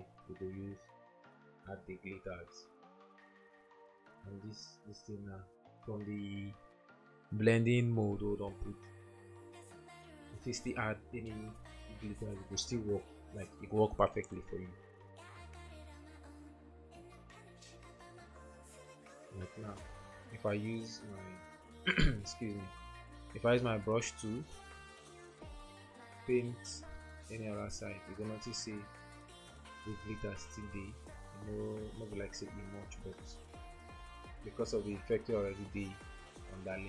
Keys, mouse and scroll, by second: 30.3 ctrl+z, 32.9 ctrl+z.